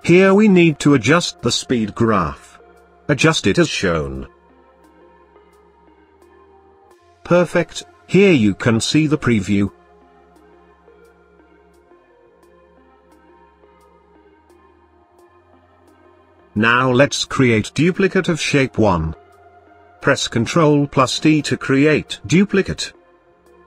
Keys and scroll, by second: 19.2 ctrl+d.